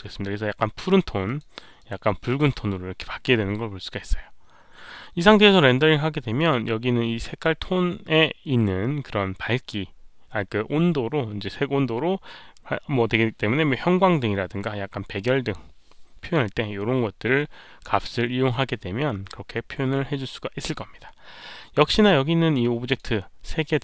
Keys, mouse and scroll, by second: 1.2 click, 1.7 click, 2.2 click, 5.4 click, 6.3 click, 16.2 click, 22.5 click.